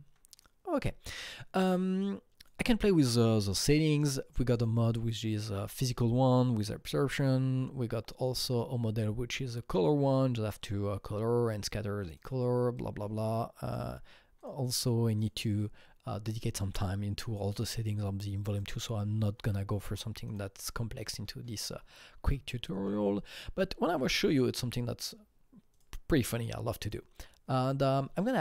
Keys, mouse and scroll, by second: 2.3-4.5 alt+drag, 4.5 click, 5.3 click, 8.5 click, 12.0-13.6 drag, 14.4 click, 15.1 click, 18.5 click, 20.6 click, 24.1 click, 25.7-26.8 drag, 27.1-28.4 drag.